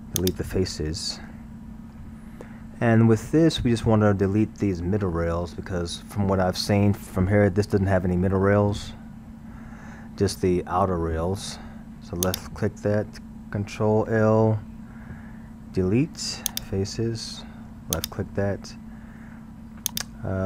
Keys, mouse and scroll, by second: 1.0-2.4 middle drag, 2.4-5.3 scroll, 12.3 click, 14.1 ctrl+l, 15.8 Delete, 18.0 click, 19.9-20.4 drag.